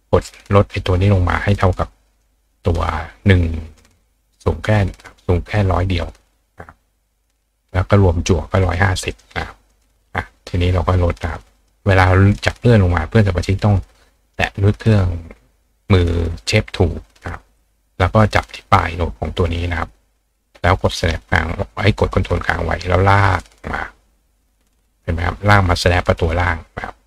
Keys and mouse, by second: 2.2 click, 3.8-5.5 drag, 6.7-8.3 drag, 9.1 click, 9.7 click, 11.6 click, 12.3-14.3 drag, 22.0-27.0 ctrl+drag.